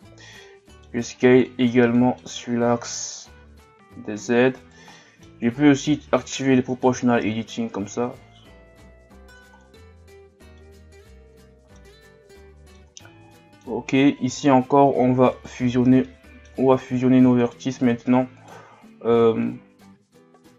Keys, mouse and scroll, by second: 0.4 middle click, 1.2 scroll down 1, 1.5-2.5 middle drag, 2.5-2.8 scroll up 2, 3.2 s, 4.9-6.0 middle drag, 6.0 o, 9.6-11.3 middle drag, 11.3 scroll up 1, 11.3 middle click, 11.9 scroll up 1, 12.4 middle click, 13.1 scroll down 2, 13.3 middle click, 13.9-14.7 scroll up 2, 15.3 right click, 15.7 scroll down 2, 16.0 middle click, 16.6-17.4 scroll up 1, 17.4 shift+right click, 18.4 shift+right click, 19.4-20.5 middle drag.